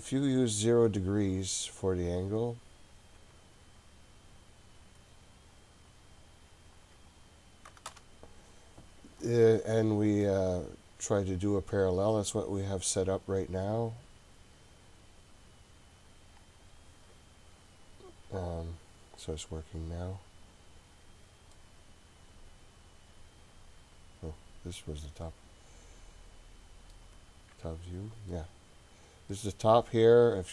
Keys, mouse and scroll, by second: 0.9-5.5 drag, 5.9 click, 6.2-8.7 drag, 13.6-16.1 scroll up 5, 16.4-19.5 drag, 21.5-27.0 middle drag, 27.5 KP_7, 29.3-30.5 middle drag.